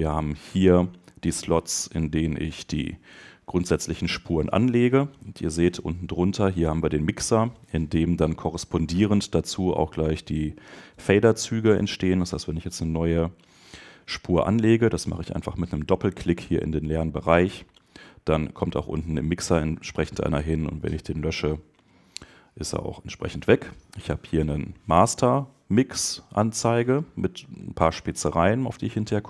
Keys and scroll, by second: 20.3 BackSpace.